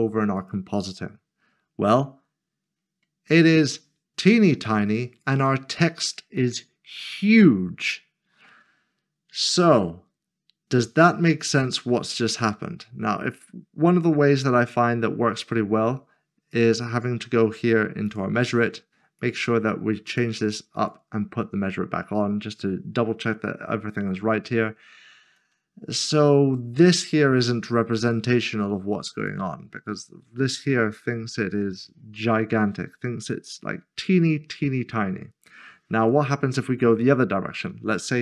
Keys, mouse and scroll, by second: 0.4 click, 2.8 click, 4.3-9.8 scroll up 1, 16.5 click, 29.2 click, 30.2 scroll up 1, 31.3 scroll down 1, 36.0 click, 38.0-38.2 typing.